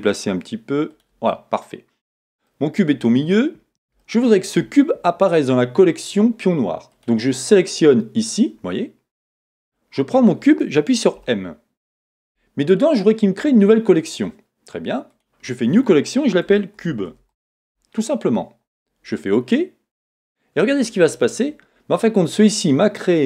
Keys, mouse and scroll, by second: 1.0 click, 1.3 middle click, 3.0 scroll up 1, 4.0 shift+middle click, 8.6 click.